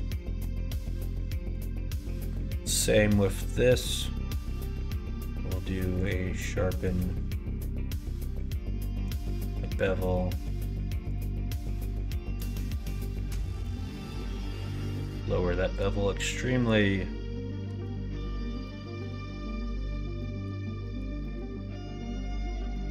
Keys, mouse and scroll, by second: 0.7 click, 1.5 click, 3.1 middle click, 4.4 middle click, 4.7 q, 6.6 middle click, 6.9 q, 12.3-14.5 drag, 15.7-19.6 drag, 20.1 middle click, 20.7 middle click, 21.1 middle click, 22.2 Tab, 22.6 middle click.